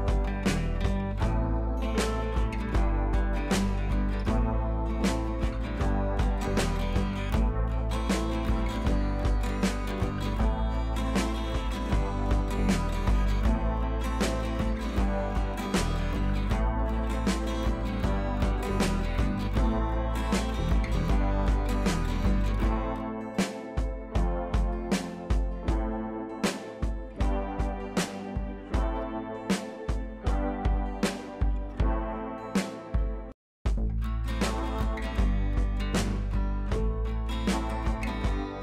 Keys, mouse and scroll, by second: 0.1 click, 0.6 shift+click, 4.0-6.1 drag, 7.9 click, 8.4 ], 8.5 ], 11.5 click, 14.0 scroll down 1, 14.8 click, 16.2 click, 19.0 click, 22.6 v, 23.2 ctrl+a, 24.0 ctrl+c, 25.2 click, 26.5 scroll down 1, 27.3 ctrl+v, 27.8 ctrl+scroll up 2, 28.4 ctrl+t, 29.0-32.0 alt+drag, 36.6 click, 37.4 click, 37.5 right click.